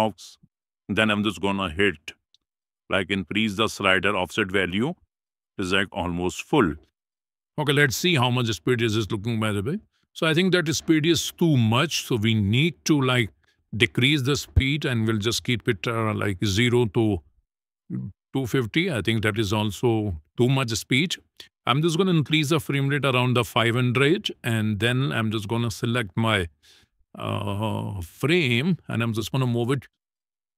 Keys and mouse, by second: 0.9 middle click, 1.6 shift+middle click, 2.1 middle click, 2.5 shift+middle click, 3.9-5.5 drag, 6.5 click, 7.8 click, 8.5 space, 10.8 space, 11.7 click, 13.1 g, 14.8 click, 15.9 click, 16.8 space, 18.5 space, 21.6-23.3 drag, 22.9 KP_0, 26.5 shift+middle click, 28.1 g.